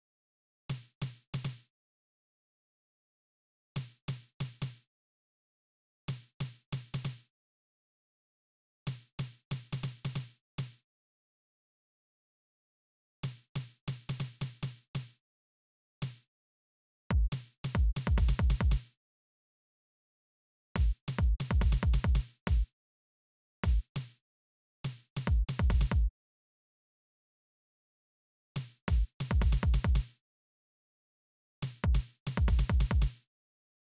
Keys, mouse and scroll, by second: 0.2 space, 1.8 space, 1.9 right click, 2.3 click, 2.7 click, 3.0 right click, 3.2 space, 5.0 space, 7.3 space, 7.7 click, 8.1 click, 8.4 space, 10.5 space, 10.6 click, 10.8 scroll up 1, 11.5-12.7 scroll up 3, 12.8 space, 14.8 space, 15.1 scroll up 1, 15.3 click, 15.5 space, 16.6 click, 16.9 space, 18.5 space, 18.8 right click, 19.8 click, 20.2 space, 22.3 space, 23.1 space, 23.5 right click, 25.7 space, 26.1 right click, 27.7 click, 28.1 space, 29.7 space, 30.1 right click, 30.7 click, 31.1 space, 33.0 space, 33.1 right click, 33.7 click.